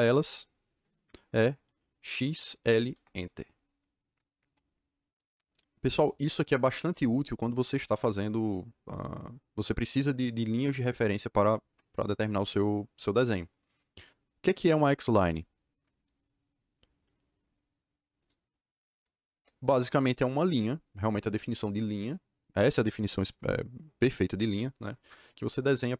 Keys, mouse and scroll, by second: 2.1 x, 2.5 l, 2.9 Return, 15.9 click, 18.1 click, 19.2 KP_Enter.